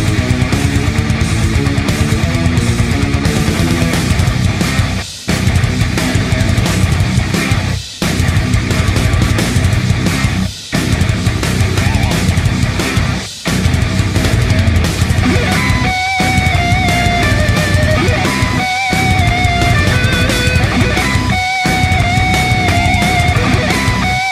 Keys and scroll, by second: 19.6-22.1 space, 23.1-23.7 space.